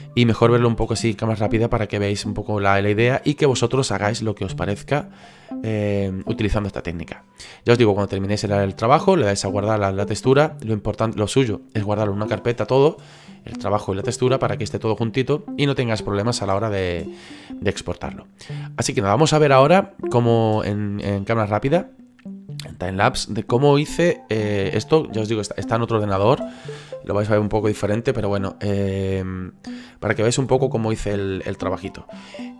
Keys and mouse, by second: 0.0 click, 1.7 middle click, 9.5 click.